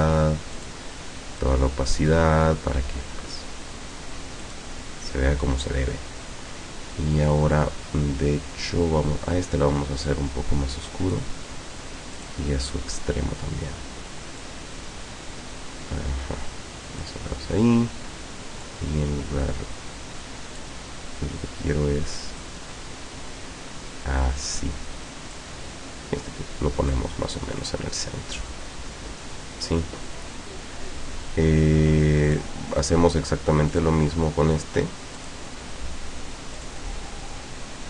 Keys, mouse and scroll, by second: 0.6 click, 1.4-2.3 drag, 4.5 click, 10.1-11.4 drag, 12.2 click, 14.5-17.3 drag, 18.7-20.9 drag, 22.5-24.9 drag, 25.4-27.1 drag, 32.3 click, 33.7 click, 35.2 click, 36.6 click.